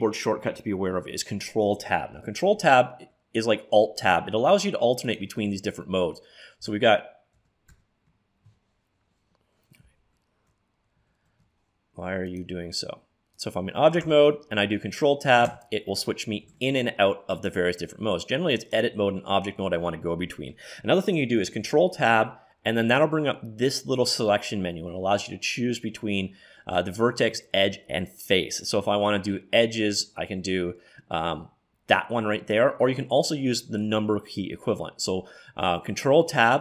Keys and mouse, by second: 2.5 ctrl+Tab, 5.1 click, 5.9-7.0 drag, 6.7 ctrl+Tab, 7.7 ctrl+Tab, 10.0 shift+Tab, 11.1 ctrl+Tab, 14.0 ctrl+Tab, 15.5 ctrl+Tab, 16.5 ctrl+Tab, 19.0 click, 21.7 ctrl+Tab, 36.3 ctrl+Tab.